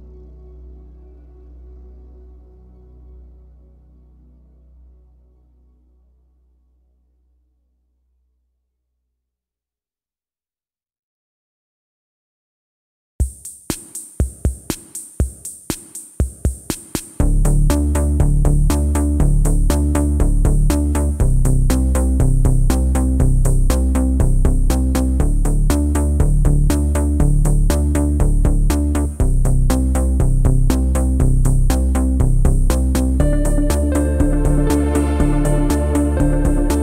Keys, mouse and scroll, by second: 0.2-0.9 scroll up 4, 0.7 click, 0.9 shift+middle click, 1.2 Tab, 1.5 alt+middle click, 1.8 alt+middle click, 2.6-6.5 typing, 3.4 click, 4.6 click, 6.2 middle click, 7.5 Tab, 7.7 scroll down 5, 7.9-9.5 middle drag, 9.5 ctrl+s, 10.5 shift+middle click, 10.8-11.1 scroll up 4, 11.1 ctrl+s, 11.3-11.8 scroll down 6, 11.8 g, 12.3 b, 12.9 shift+middle drag, 13.2-13.5 scroll up 4, 13.5 ctrl+s, 14.4-17.0 shift+middle drag, 17.0-17.9 scroll up 1, 17.9 click, 18.1 g, 19.9 h, 20.5 click, 20.7 g, 21.4 alt+middle click, 22.2 g, 23.0 r, 25.3-25.7 scroll up 3, 25.7 g, 26.4 s, 27.0 g, 27.8-28.1 middle drag, 28.1-28.6 scroll down 3, 28.6 g, 29.6 g, 30.3 shift+middle click, 30.5-31.2 scroll up 4, 31.2 g, 32.7 Tab, 32.7-33.5 scroll down 8, 33.5 Tab, 33.7 b, 34.2 o.